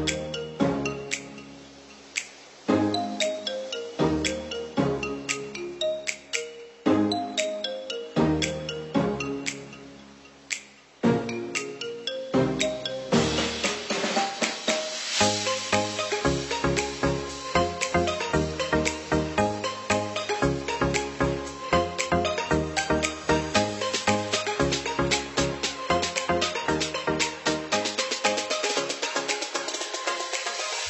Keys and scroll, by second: 0.1 ctrl+0.